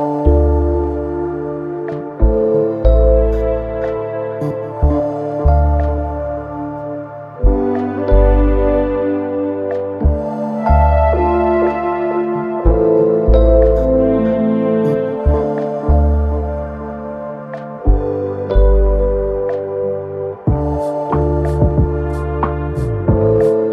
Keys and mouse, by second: 0.0 r, 0.7-1.9 drag, 1.9 w, 2.5 click, 3.8 alt+middle click, 4.7 click, 5.8-8.4 drag, 9.1 click, 9.5 click, 9.7-11.4 shift+drag, 19.7 ctrl+click, 21.0 p, 22.6-23.2 drag, 23.6 alt+click.